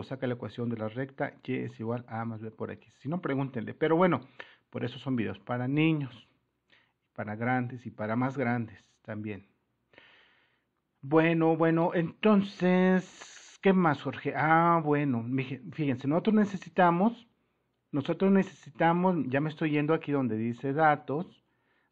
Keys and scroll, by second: 20.7 super++.